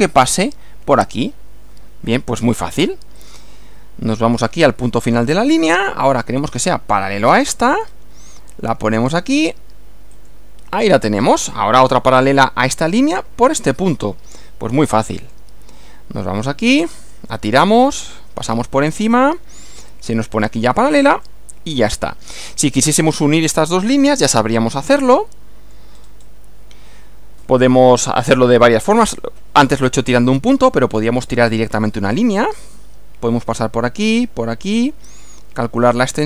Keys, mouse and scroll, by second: 3.2 click, 5.5 click, 10.1 click, 11.2 click, 15.2 click, 17.0 click, 21.1 click, 22.0 click, 24.7 scroll down 2, 25.2 shift+middle click, 25.9-26.5 shift+scroll up 3, 31.4 click.